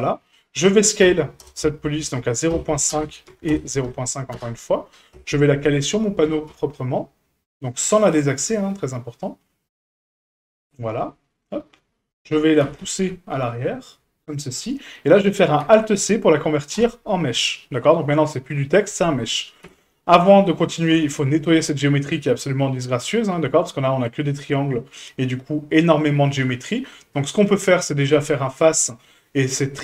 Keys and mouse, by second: 1.0 s, 3.3 s, 5.1 KP_1, 6.2 g, 10.9-11.4 middle drag, 12.6 g, 14.6-15.0 middle drag, 15.6 alt+c, 18.9 middle drag, 19.7 Tab, 20.9 a, 22.1 middle click, 23.7 middle click, 24.4 middle click, 28.0-29.8 drag.